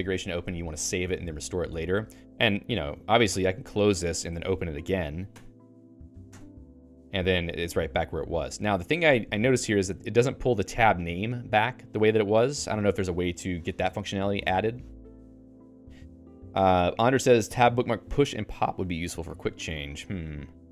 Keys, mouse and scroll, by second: 3.4 click, 4.3 alt+x, 5.3 Return.